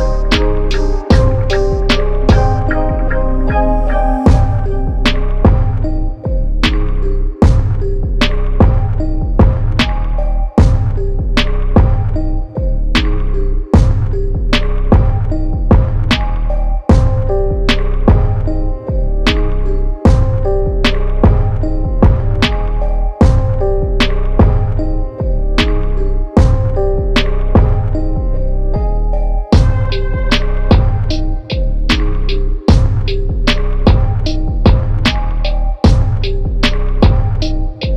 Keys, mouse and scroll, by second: 4.2 typing, 6.0 c, 9.7 c, 9.8 click, 13.0 click, 15.4 click, 18.5-20.8 drag, 24.0 click, 26.6 click, 33.7 Tab, 34.4 Tab, 36.3 Tab.